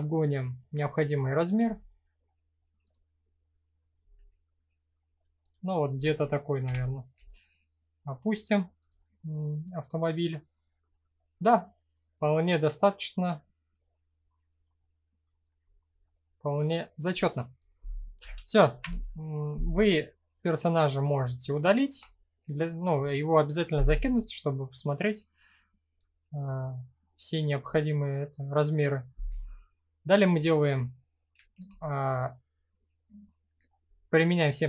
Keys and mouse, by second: 1.1 s, 2.4 click, 3.6 s, 5.0 click, 6.2 g, 6.7 z, 8.4 click, 8.9-13.1 middle drag, 14.3 middle click, 15.6-16.3 middle drag, 16.9 click, 17.8 Delete, 20.2-20.6 middle drag, 21.1-21.6 shift+middle drag, 21.7-22.1 middle drag, 24.1 middle click, 25.7 click, 26.3-26.6 middle drag, 27.2-28.1 middle drag, 30.9 ctrl+a.